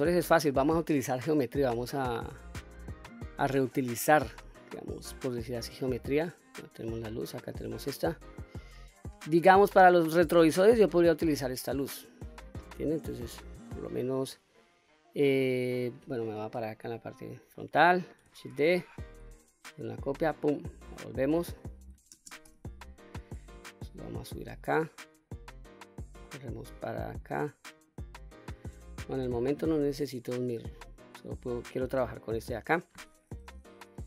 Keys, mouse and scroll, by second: 0.1-0.9 scroll down 2, 0.9 click, 5.9 click, 7.0 click, 10.5 click, 13.2-14.3 middle drag, 16.4 KP_1, 18.3 shift+d, 20.0 right click, 21.9 shift+space, 23.6-24.5 drag, 25.5-27.0 drag, 27.7-28.3 drag, 30.2 click, 33.6-34.0 middle drag.